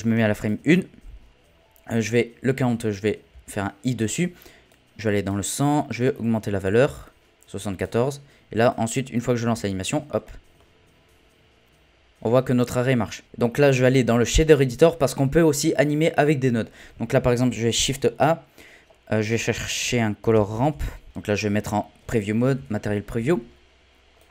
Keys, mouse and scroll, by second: 3.3 i, 4.7-6.9 drag, 6.9-7.2 scroll down 4, 7.8 click, 8.7 click, 9.5 space, 9.9 scroll up 1, 9.9 scroll down 11, 10.2-14.1 middle drag, 14.1-17.3 drag, 17.7 shift+a, 21.1 z, 21.3-22.4 scroll up 16, 22.4 a, 22.5 a, 24.2-24.3 drag.